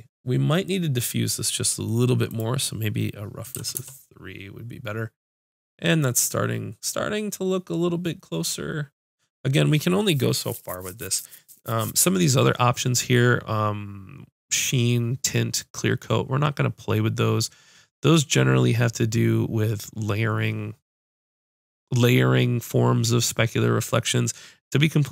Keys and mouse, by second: 2.3-8.9 drag.